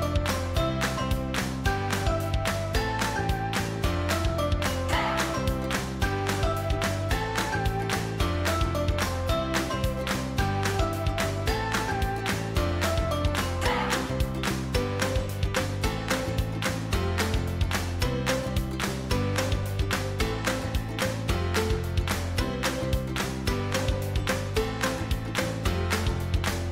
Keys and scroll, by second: 12.1 ctrl+j, 21.2 ctrl+l.